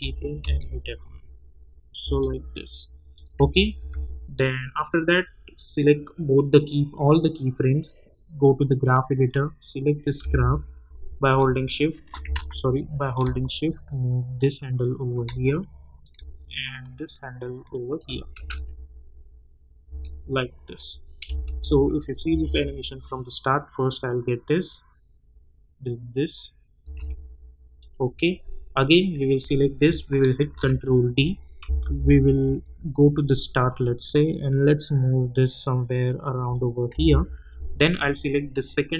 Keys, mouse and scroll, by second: 0.0 F9, 0.4 space, 3.1 click, 3.3 j, 3.7 j, 5.6-10.2 drag, 10.2 =, 11.3 click, 12.3 ctrl+z, 13.6-15.3 shift+drag, 16.3 shift+click, 18.3 space, 20.7 click, 21.8 click, 22.2 space, 26.8 space, 27.8 click, 30.4 ctrl+d, 31.6 =, 31.8 =, 32.6-36.9 drag, 36.9 [, 37.8 click.